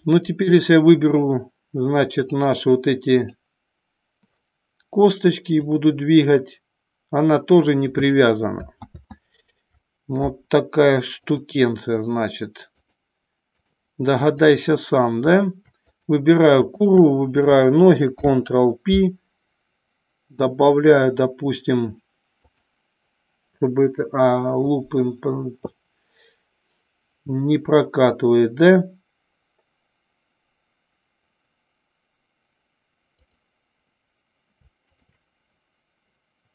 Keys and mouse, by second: 0.6 click, 2.4-3.6 drag, 5.8-8.1 drag, 9.3 ctrl+z, 12.8 click, 14.5 click, 15.9 click, 16.8 shift+click, 18.1 ctrl+p, 33.4 click, 34.9 shift+click.